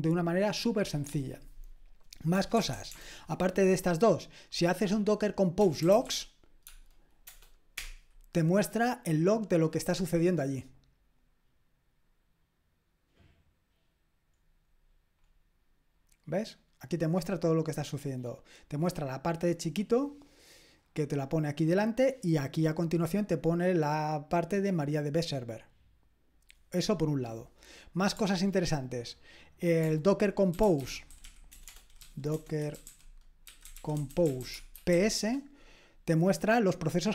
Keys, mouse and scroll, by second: 2.3 BackSpace, 2.5 BackSpace, 2.7 BackSpace, 2.9 BackSpace, 5.5-7.2 typing, 7.7 Return, 14.9-15.9 scroll up 1, 15.9-16.8 scroll up 1, 16.8-21.9 scroll up 1, 21.9-22.7 scroll down 1, 30.3-35.4 typing.